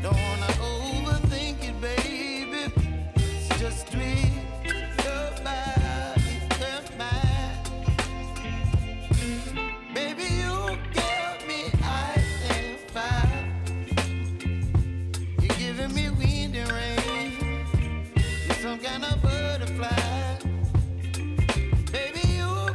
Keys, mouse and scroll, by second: 8.3 click, 8.7-11.3 drag, 11.3 F9, 12.1-15.3 drag, 15.6 space, 19.3 space, 19.8-22.7 drag.